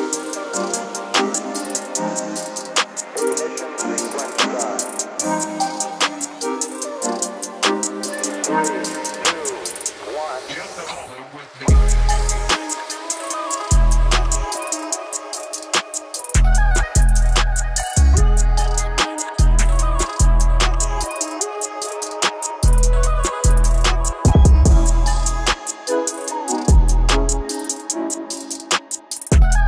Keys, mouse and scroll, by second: 0.4-1.7 typing, 2.3-29.6 drag.